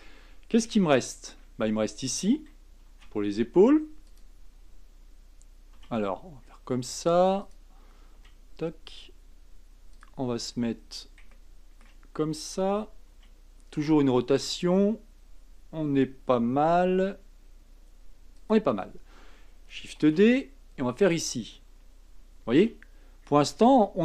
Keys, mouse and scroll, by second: 0.8 shift+middle click, 1.3-2.8 shift+scroll up 1, 2.8 shift+d, 5.7 r, 8.1 g, 10.2-11.3 scroll up 4, 11.3-13.1 shift+middle drag, 13.1 r, 16.7 g, 18.8-20.0 scroll down 1, 20.0 shift+d, 22.5 r.